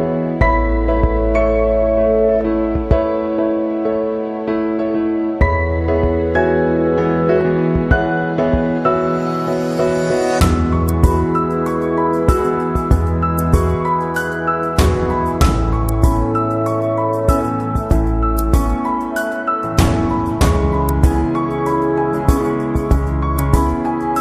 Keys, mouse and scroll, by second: 1.9 click, 3.6 click, 4.9 ctrl+d, 5.4 space, 5.6 click, 5.9 space, 7.6 f, 8.3 f, 10.4 click, 11.4 click, 13.1 click, 14.6 click, 16.0 click, 19.0 ctrl+t, 20.5 alt+shift+click, 23.5 click.